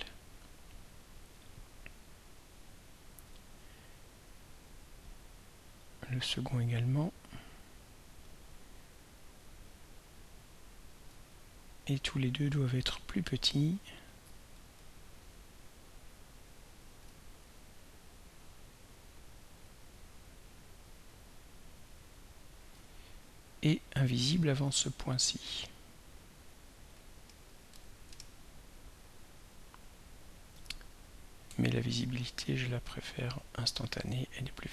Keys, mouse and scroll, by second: 1.4 right click, 3.2 click, 5.8 click, 8.2-10.3 drag, 14.7 ctrl+a, 16.3-22.3 drag, 25.7 click, 26.5 click, 27.7 0, 32.4 ctrl+y, 34.0-34.7 drag.